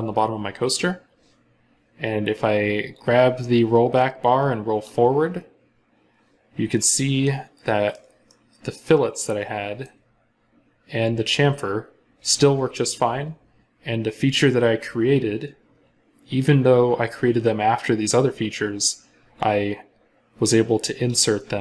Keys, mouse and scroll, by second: 6.7 middle click, 10.0 scroll down 1.